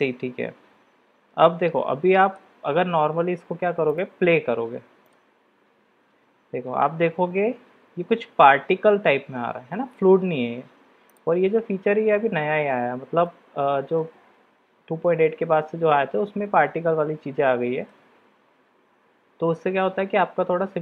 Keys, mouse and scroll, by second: 1.4-2.4 middle drag, 4.0-5.3 drag, 13.3-14.0 middle drag, 15.2-17.9 middle drag.